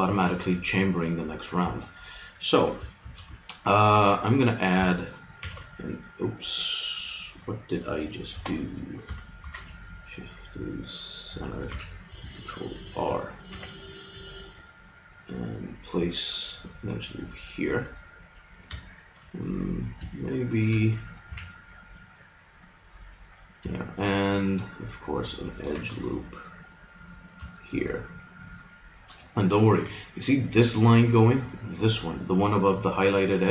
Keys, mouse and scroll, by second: 2.9 middle click, 3.4-5.0 middle drag, 5.4 shift+r, 6.6 click, 8.3 Escape, 9.4 shift+s, 11.7 a, 13.4 ctrl+r, 17.2-19.9 drag, 20.6-22.1 right drag, 21.3 a, 22.1-23.8 middle drag, 23.8 click, 24.3-25.6 middle drag, 25.7 ctrl+r, 28.6-31.1 middle drag.